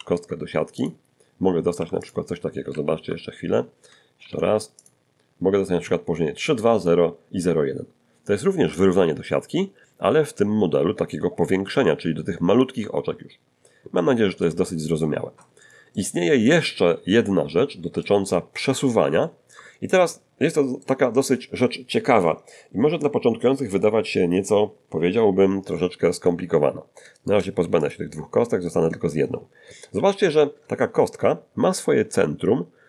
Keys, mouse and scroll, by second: 0.0 shift+s, 0.8 shift+click, 1.8 g, 2.0 click, 2.6 a, 2.6 shift+s, 4.2 shift+s, 4.8 shift+click, 13.5 scroll down 2, 14.0 shift+middle click, 15.0-18.2 shift+middle drag, 18.6 scroll up 2, 19.2 shift+middle click, 19.9-21.0 shift+middle drag, 27.2 shift+right click, 27.6 shift+x, 27.8 shift+click, 28.7 right click, 30.0 1, 31.5-31.8 scroll up 1.